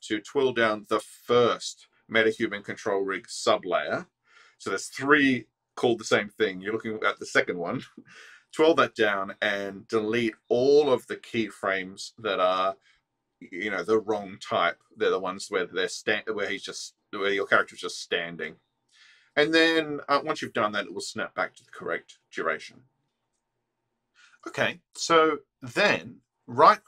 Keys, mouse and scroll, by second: 9.5 click, 10.3 ctrl+alt+middle click, 11.6-11.9 scroll down 2, 12.2 ctrl+alt+middle click, 13.5-15.2 drag, 15.4 middle click, 16.4 middle click, 18.3-19.7 drag, 20.2 ctrl+x, 21.3-22.1 alt+drag, 26.4 right click.